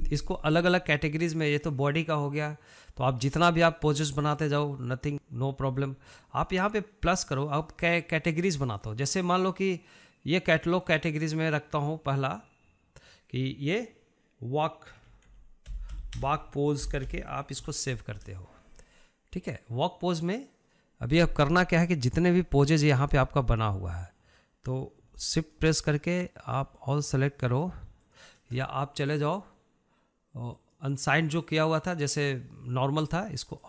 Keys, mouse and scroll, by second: 9.9 click, 11.8 click, 12.0-15.1 drag, 21.5 click, 23.5 shift+click, 24.1 shift+drag, 26.7 shift+click, 28.1 ctrl+shift+click, 28.8 ctrl+shift+click, 29.3 ctrl+shift+drag, 31.8 click.